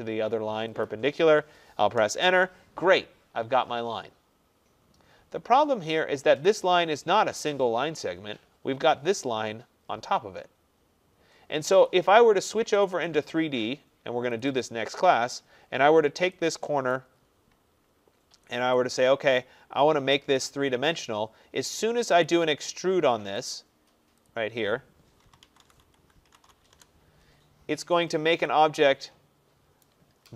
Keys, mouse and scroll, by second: 0.9 click, 2.0 Return, 6.6 click, 12.0 click, 12.9 click, 13.1 click, 14.5 click, 14.7 click, 15.1-15.4 middle click, 15.6-16.4 scroll, 17.0 right click, 17.2-17.9 scroll, 18.8 right click, 19.4-20.9 scroll, 20.9 middle click, 21.0 middle click, 21.9-22.3 scroll, 22.3 click, 23.5 click, 24.3 click, 25.3-29.3 typing, 28.2 click, 29.9 right click.